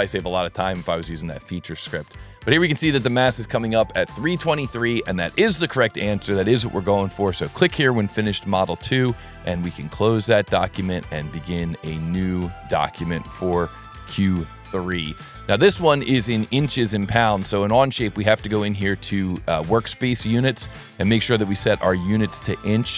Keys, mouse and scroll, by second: 5.8 click, 7.4 click, 8.5 click, 9.2 click, 10.2 click, 11.1 click, 12.4 click, 14.3 3, 17.9 click, 19.8 click, 20.8 click, 22.2 right click.